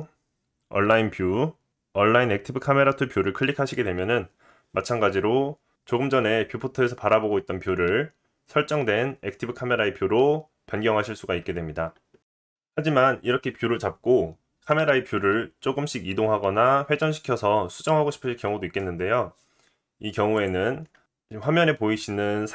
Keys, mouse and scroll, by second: 12.5-20.3 middle drag, 20.3 click.